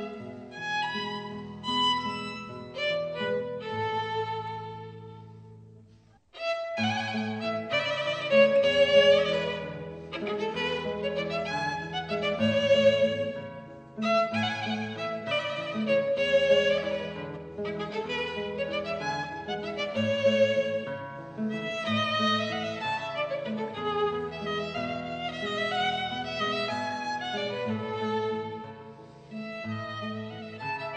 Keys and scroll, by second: 3.3 super+z, 7.5 Escape, 7.6 b, 8.4 Escape, 8.6 b, 8.9 super+z, 9.2 super+z, 11.3 b, 11.8 super+z, 12.0 super+z, 16.4 super+z, 16.8 super+z, 17.2 super+z, 24.0 super+z, 24.8 Escape, 27.7 super+z, 30.1 super+z.